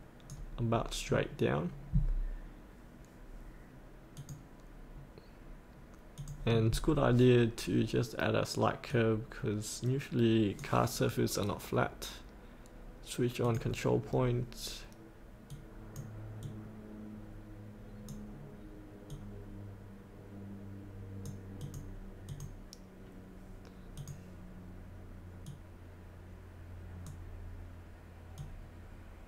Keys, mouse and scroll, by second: 0.6 scroll up 1, 4.1 click, 6.2-10.9 drag, 14.1 scroll down 1, 15.5-29.2 drag.